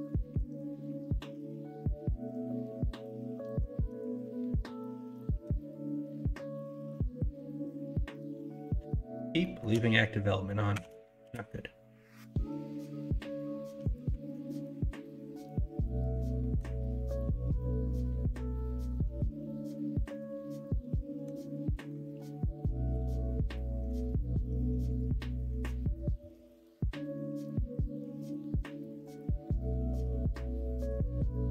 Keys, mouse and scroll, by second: 0.4 3, 4.2 s, 6.9 ctrl+z, 7.3 ., 8.6 shift+middle click, 9.4 shift+middle click, 10.8 s, 14.2 alt+z, 14.4-16.6 middle drag, 16.8-21.3 middle drag, 21.8-22.1 scroll up 1, 22.1-23.9 middle drag, 24.0 alt+z, 25.3 middle click, 27.1-29.2 drag, 29.2-31.5 middle drag, 29.2 scroll up 1, 30.0-30.3 scroll down 1, 31.0-31.3 scroll down 1.